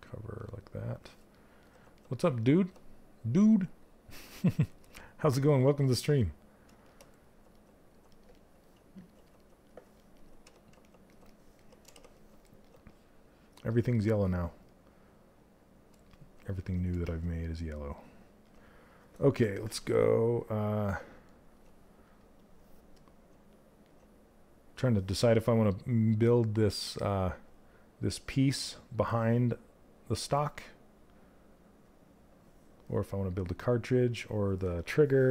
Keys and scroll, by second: 9.9 q, 11.4 shift+f.